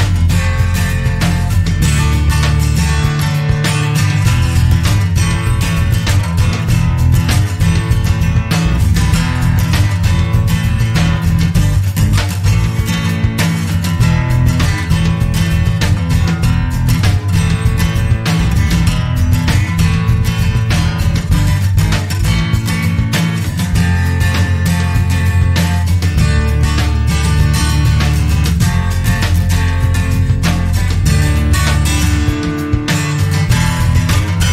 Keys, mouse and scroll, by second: 1.4 click, 6.6 click, 7.7 click, 8.3-8.7 scroll down 1, 9.0 0, 9.6 scroll down 2, 10.3-10.8 scroll up 2, 11.5 click, 13.3 click, 14.5 click, 15.3-16.2 typing, 17.6 click, 18.2-19.5 typing, 20.3 click, 20.9-21.9 typing, 22.7 click, 23.4-23.9 scroll down 2, 25.0 click, 26.0 click, 26.4-26.7 scroll down 1, 27.1 scroll up 1, 28.1 click, 30.1 scroll up 2, 30.6-30.9 scroll down 2, 31.0 click, 32.1-32.4 scroll up 2, 32.9 click.